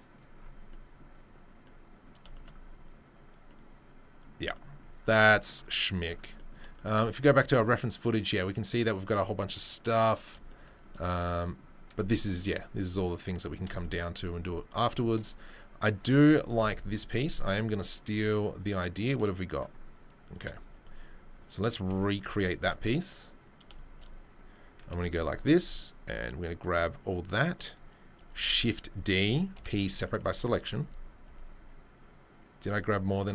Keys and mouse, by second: 12.7 click, 12.8-21.3 middle drag, 20.4 Delete, 21.3 click, 21.4-25.6 middle drag, 22.2 Tab, 22.6 3, 24.8 c, 28.3 shift+d, 29.5 p, 30.3 Tab, 30.8 Tab, 31.3 Tab, 31.8 click, 33.2 g.